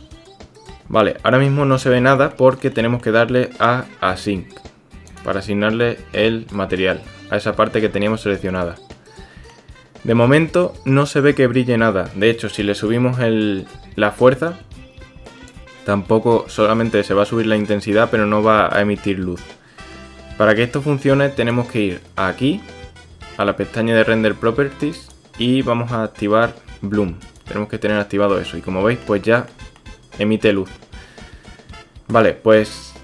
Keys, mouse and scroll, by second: 0.7-1.0 drag, 1.0-1.3 middle drag, 1.8-2.2 middle drag, 2.3-2.6 shift+middle drag, 2.7 middle click, 5.8-6.5 middle drag, 7.5-8.6 middle drag, 9.0 middle click, 10.6 middle click, 15.5-21.6 drag, 25.0 click, 27.2 click, 28.5 middle click, 29.3 shift+middle click, 29.8 click, 30.2 middle click.